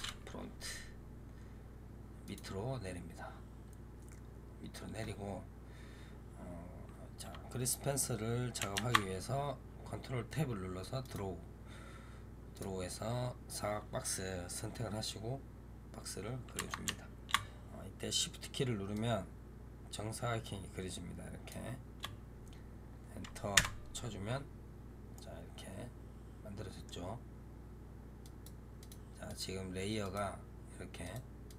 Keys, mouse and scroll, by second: 2.1 click, 8.6 ctrl+Tab, 12.4 click, 18.8-21.8 shift+drag, 25.0-28.1 middle drag, 28.1 click, 28.7 click, 29.1 click, 29.9 click, 30.9 click, 31.3 click.